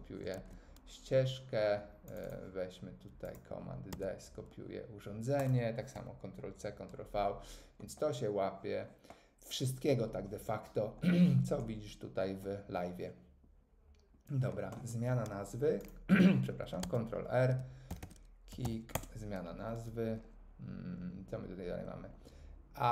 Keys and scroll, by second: 0.3 super+z, 3.9 super+d, 5.9 Delete, 16.8 super+r, 17.6-19.1 typing.